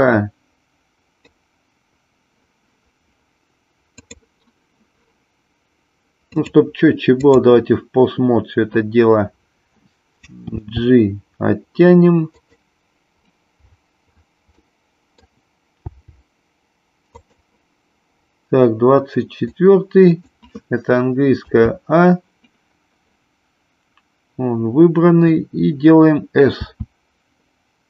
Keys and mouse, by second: 4.0 click, 6.4 click, 10.5 g, 12.5 click, 14.6 middle click, 15.8 g, 17.2 click, 19.5-20.2 drag, 21.5 a, 26.6 s.